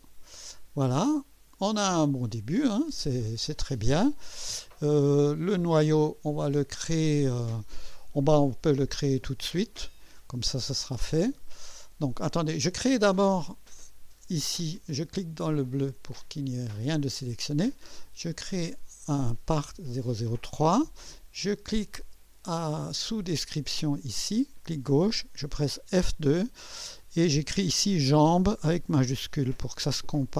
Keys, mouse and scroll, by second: 0.0 click, 1.1-2.9 drag, 3.8-4.5 right drag, 4.9-5.9 right drag, 15.8 click, 18.2 click, 23.9 click, 25.8 F2, 28.2-30.3 typing.